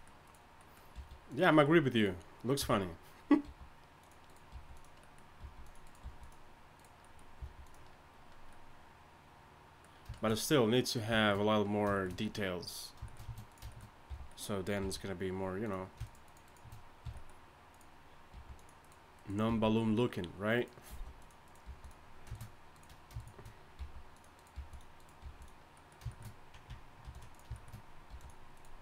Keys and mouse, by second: 0.6-2.4 middle drag, 0.9 g, 2.6 f, 3.4 g, 4.2 click, 4.5 g, 5.4 g, 6.0 g, 6.1-8.8 drag, 7.4 g, 11.4 middle click, 12.2 click, 12.2 middle click, 12.3 right click, 13.5-15.0 right drag, 14.1 f, 14.8 g, 17.0 f, 18.5 g, 19.5 g, 20.9 g, 21.6 g, 23.8 g, 24.5 g, 25.2 g, 27.0 ctrl+r, 28.1 g.